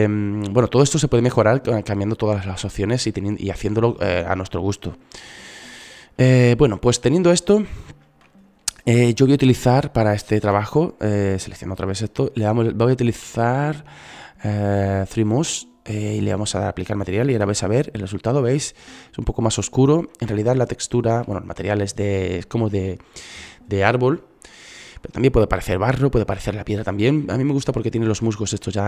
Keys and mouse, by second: 7.0 shift+z, 14.2 shift+z, 25.6 middle click.